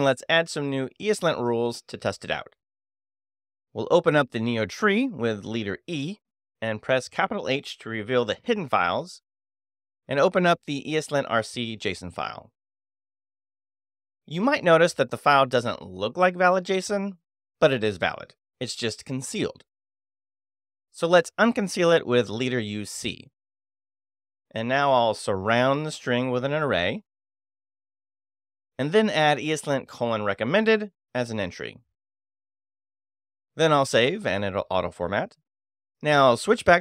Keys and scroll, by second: 5.0 space, 5.1 e, 7.9 shift+h, 9.9 Return, 10.7 space, 11.1 e, 20.4 space, 20.8 u, 21.4 c, 23.2 s, 23.5 shift+', 24.5 shift+n, 26.0-28.1 typing, 29.7-32.3 typing, 33.7 Escape, 34.2 shift+;, 34.4 shift+w, 34.5 Return.